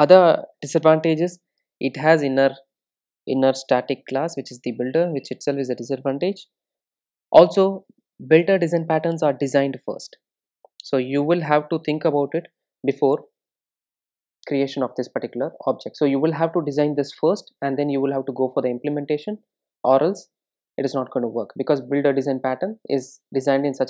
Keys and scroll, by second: 12.3 super+d, 13.4 super+z, 17.2 super+z.